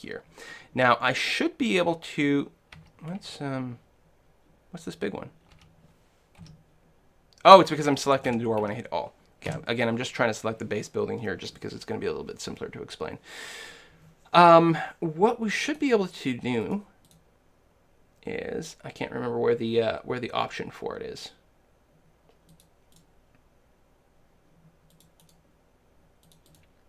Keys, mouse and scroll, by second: 2.8 a, 3.2 a, 5.2-7.1 middle drag, 5.6 a, 6.4 l, 8.1 a, 8.3 a, 8.6 a, 9.6 l, 15.7-18.9 drag, 23.0-24.8 drag, 25.2-26.8 drag.